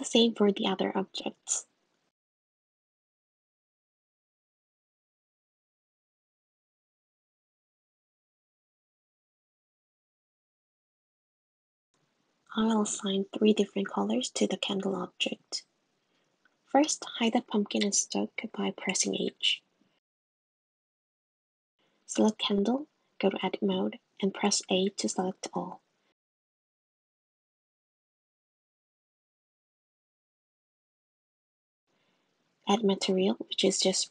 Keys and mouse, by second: 4.6 click, 5.6 click, 6.6 click, 7.2 drag, 13.6 click, 14.9 g, 16.4 click, 17.2 click, 18.6 shift+click, 19.2 h, 20.9 click, 26.7 a, 27.9 click, 29.3-29.8 drag, 32.0 click.